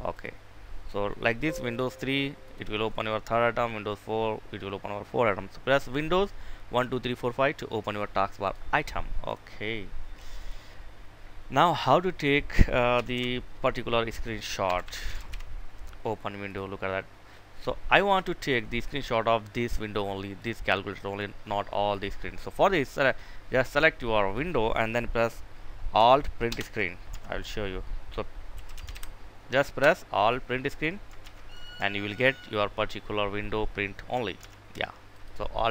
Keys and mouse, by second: 8.8 right click, 10.2 click, 12.7 typing, 14.3-14.8 typing, 16.0-23.9 drag, 28.0-28.9 typing, 29.4 Return, 31.0 ctrl+v, 34.0 ctrl+z, 34.8 click.